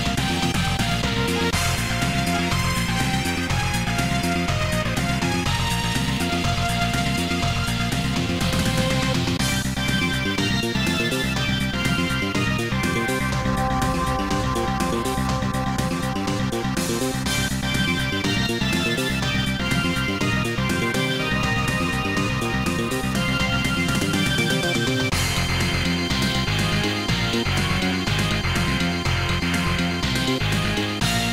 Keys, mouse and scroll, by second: 2.5 click, 3.3 click, 5.5 scroll down 2, 7.2 scroll up 2, 8.0 click, 9.8 typing, 10.4 Return, 11.7 middle click, 14.1 0, 15.4-16.1 typing, 18.7 click, 19.4-19.9 typing, 20.2 Return, 22.2-27.6 typing, 28.7 ctrl+s, 29.0 click, 29.8 scroll up 1.